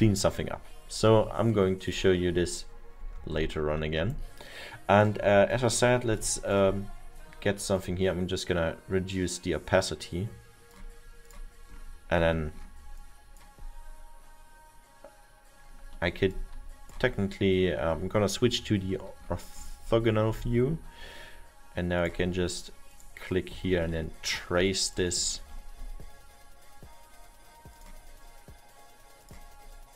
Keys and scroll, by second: 18.7 F6.